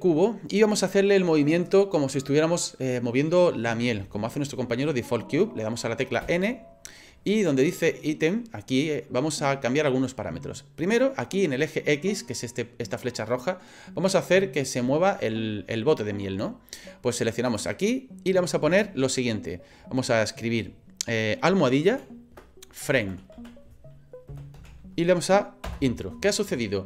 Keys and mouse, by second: 6.2 n, 17.5-26.3 drag.